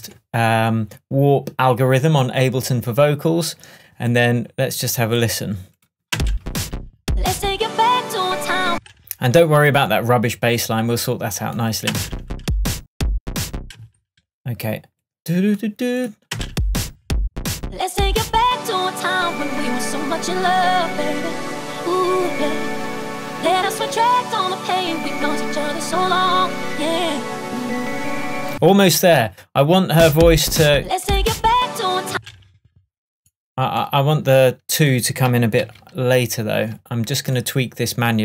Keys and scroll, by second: 6.2 space, 8.7 space, 11.9 space, 13.8 space, 16.4 space, 27.5 super+e, 28.6 super+space, 32.1 space, 35.7 super+e.